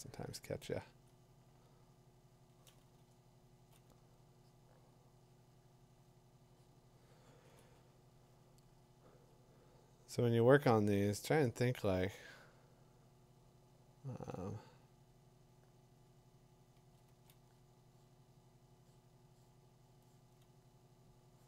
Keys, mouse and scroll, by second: 1.0 click, 3.4 2, 3.5 5, 3.6 7, 5.0 [, 7.3 ], 7.5 ], 16.7 [, 17.1 [.